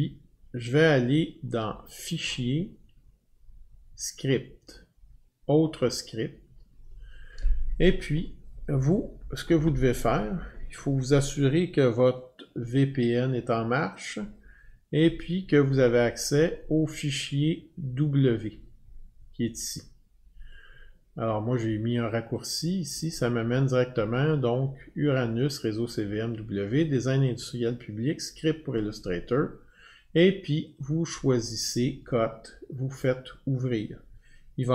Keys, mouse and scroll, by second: 2.1 click, 6.1 click, 15.0 click, 15.4-16.8 drag, 20.0 click, 22.5-27.6 drag, 30.7 click, 33.0 click.